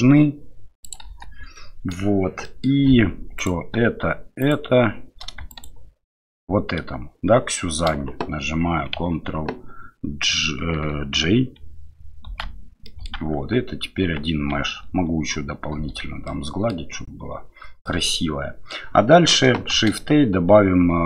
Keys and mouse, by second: 0.9 click, 1.0 Delete, 1.5-1.9 middle drag, 2.4 middle drag, 3.4 click, 4.4 shift+click, 5.5 shift+click, 6.2 shift+click, 12.3 ctrl+j, 12.8 middle click, 13.4 Tab, 14.0 Tab, 16.1 ctrl+2, 16.3-16.7 middle drag, 17.8-18.7 middle drag, 19.7 shift+a.